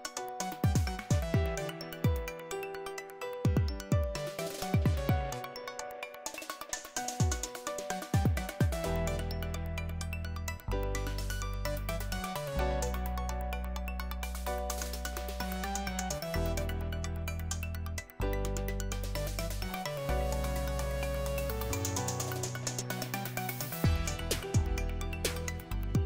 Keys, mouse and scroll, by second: 0.1 click, 2.6 3, 5.1 click, 7.9 click, 10.8 click, 13.0 click, 14.5 click, 15.6 click, 17.6 click, 20.0 click, 22.8-24.2 drag.